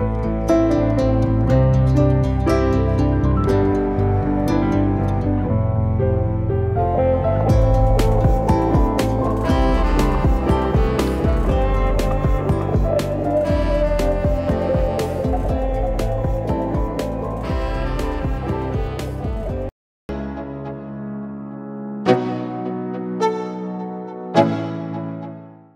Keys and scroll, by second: 15.6 v.